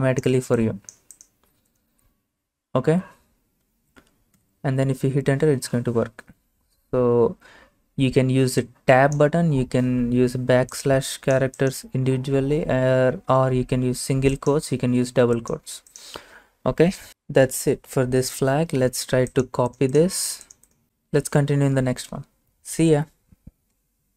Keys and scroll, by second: 4.4 Return.